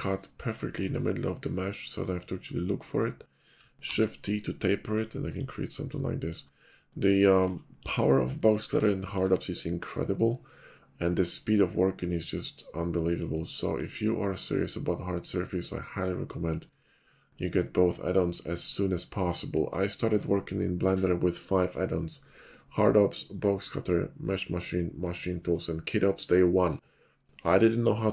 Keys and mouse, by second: 0.5 ctrl+click, 14.2-15.6 middle drag.